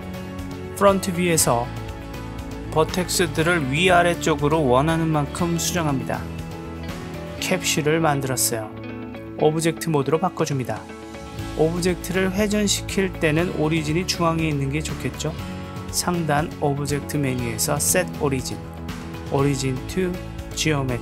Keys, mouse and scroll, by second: 0.2-0.8 middle drag, 2.1 click, 2.7 Tab, 2.7 click, 3.6 click, 4.3 click, 4.9 click, 5.6 click, 6.1 click, 6.7 Tab, 7.8 click, 8.3-9.8 middle drag, 11.4-12.5 drag, 12.9 click, 16.7-21.0 drag.